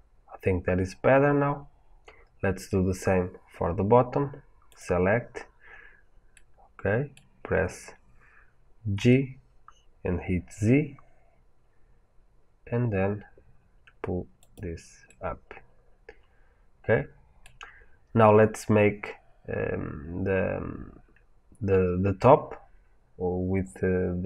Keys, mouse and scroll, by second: 0.5-4.6 middle drag, 4.6 click, 6.2-12.8 middle drag, 8.8 g, 14.4 click, 15.0-24.2 middle drag, 18.0-20.5 scroll.